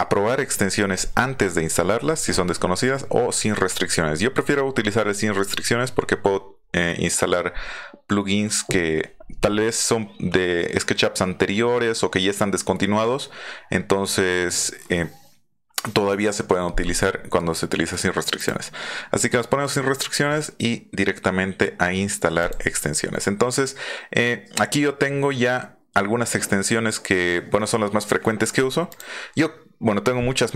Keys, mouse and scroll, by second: 18.4 click, 22.4 click, 28.9 click.